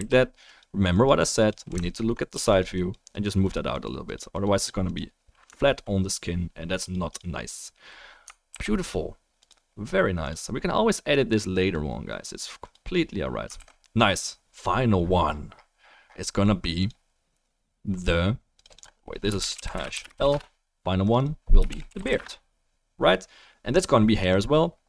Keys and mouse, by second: 0.2 drag, 1.8 alt+middle click, 2.5 f, 2.5 click, 5.4 alt+drag, 5.4 alt+right drag, 5.5 alt+middle click, 8.5 ctrl+s, 13.6 ctrl+s, 18.6 right click, 21.1 right click, 24.3-24.8 right drag.